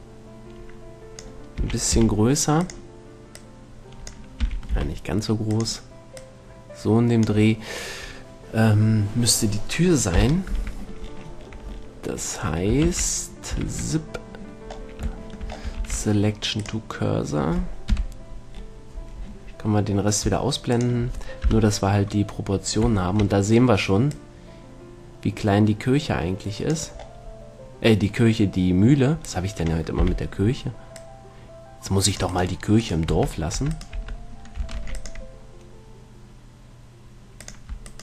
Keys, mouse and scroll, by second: 1.9 s, 3.0-5.5 drag, 5.2 s, 6.0-8.3 drag, 10.4 KP_7, 13.1 shift+c, 14.0 shift+a, 16.3 shift+s, 18.1 KP_Decimal, 21.0-22.6 drag, 21.8 KP_1, 23.3-24.4 middle drag, 24.4-26.2 drag, 31.2-33.2 drag, 31.2 z, 32.6-34.2 right drag, 33.3 Tab, 33.9 Tab, 34.2 Tab, 35.0 ctrl+r, 37.8 click.